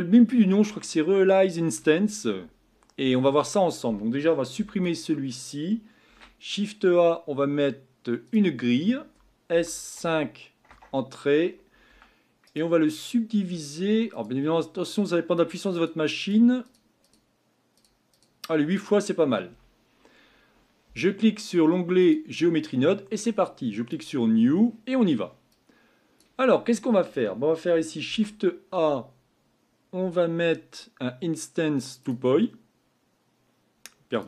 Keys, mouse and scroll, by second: 6.0 shift+a, 9.5 s, 11.9 Tab, 12.4-14.1 right drag, 14.1-19.5 drag, 19.5 Tab, 22.0 click, 23.9-32.1 drag.